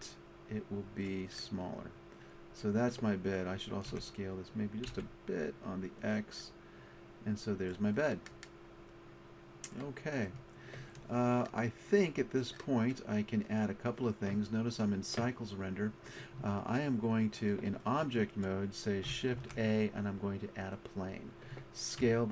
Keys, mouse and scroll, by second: 1.4-1.8 middle drag, 3.9 s, 6.1 click, 9.9-10.2 middle drag, 10.3 right click, 19.4 shift+a, 22.0 s.